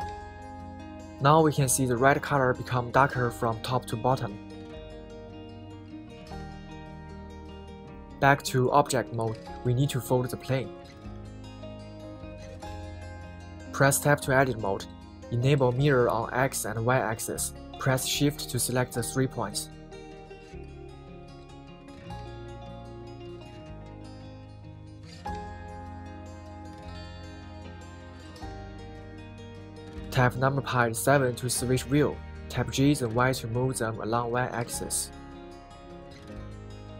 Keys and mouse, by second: 0.1 shift+k, 5.7-8.0 middle drag, 9.7 right click, 11.1-12.4 middle drag, 12.7 middle click, 12.9 click, 12.9 right click, 13.7 KP_1, 16.3 Tab, 23.3 right click, 25.3 shift+click, 30.7 KP_7, 34.3 g, 34.8 y.